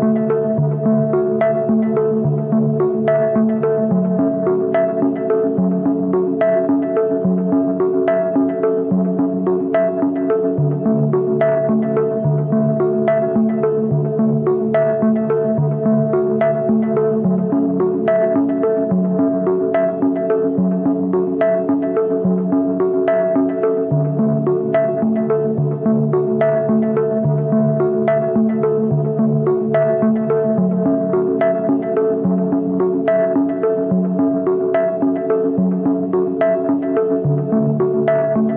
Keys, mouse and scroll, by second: 5.9 double click, 16.2 double click, 18.8 double click, 25.1-26.3 typing, 26.9 double click.